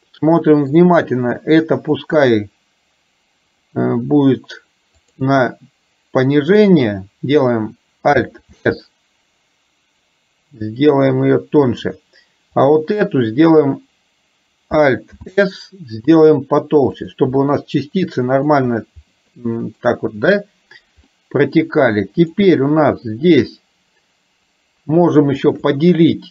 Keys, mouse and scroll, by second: 5.1 click, 8.7 alt+s, 15.1 alt+s, 17.5-18.6 middle drag, 19.4 middle click, 21.2 middle click, 22.4 click.